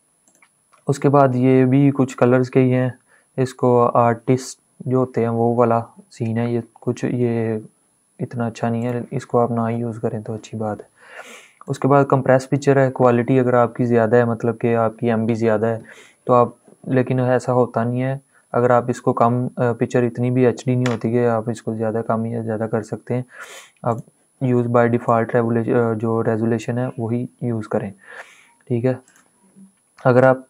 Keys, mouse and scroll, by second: 0.0 click, 8.5 click, 9.4 ctrl+z, 11.3 click, 23.6-28.8 drag.